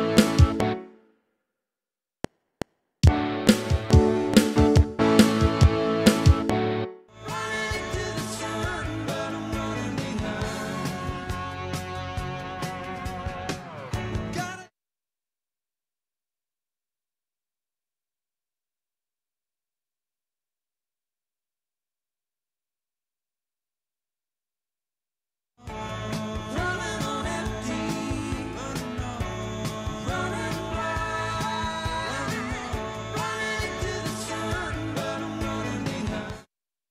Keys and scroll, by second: 0.7 space, 2.1 F7, 6.8 space, 14.4 space, 18.2 alt+Tab, 19.7 ctrl+shift+Left, 21.1 ctrl+shift+Right, 25.4 space, 29.0 Tab, 29.4 ctrl+Right, 36.2 space.